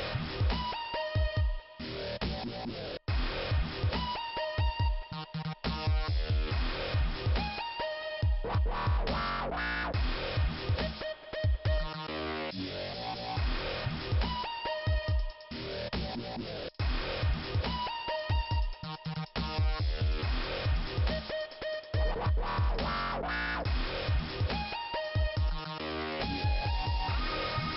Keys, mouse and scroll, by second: 0.1 click, 1.3 click, 4.3 click, 8.4 middle click, 12.1 click, 13.2 middle click, 14.8 click, 18.5 click, 19.9 click, 22.9 click.